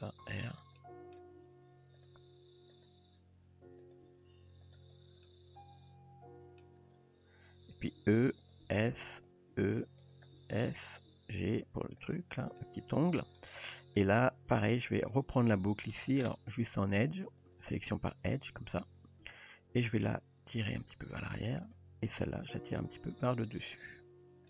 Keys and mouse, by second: 0.0 r, 0.8 middle click, 1.4 g, 2.3 r, 3.4 r, 4.0 g, 5.3-6.6 middle drag, 8.0-11.1 typing, 12.6-13.2 middle drag, 17.5 click, 19.4-20.1 middle drag, 21.0 g, 22.6 g.